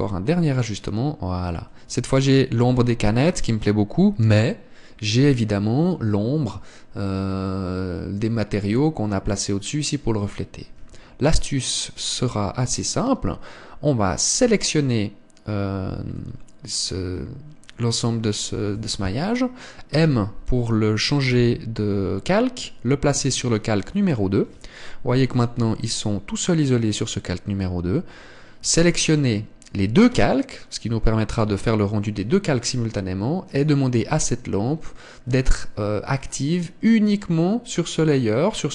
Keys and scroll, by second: 11.8 Escape, 20.9 m, 24.2 m.